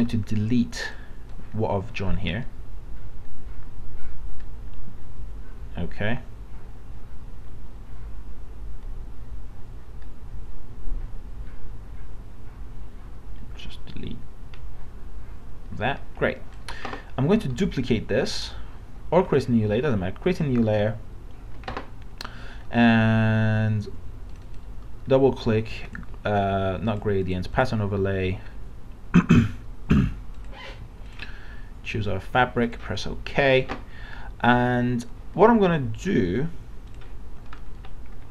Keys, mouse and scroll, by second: 0.8-17.5 drag, 17.5 right click, 19.4-33.7 drag, 37.6 middle click, 37.8 scroll down 1.